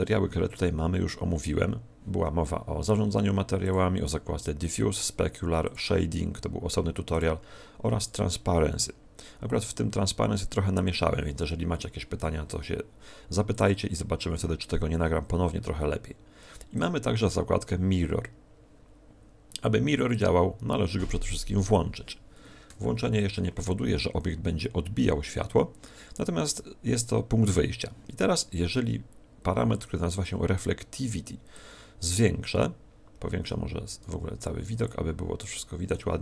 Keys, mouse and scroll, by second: 3.6 click, 13.4 click, 16.7 click, 20.0 click.